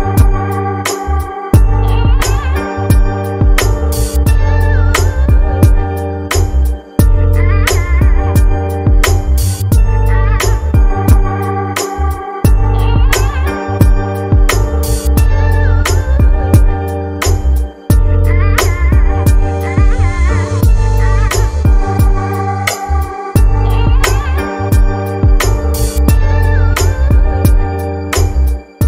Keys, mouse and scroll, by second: 0.8-4.0 drag, 7.8 click, 9.4-13.3 drag, 13.7-25.8 drag.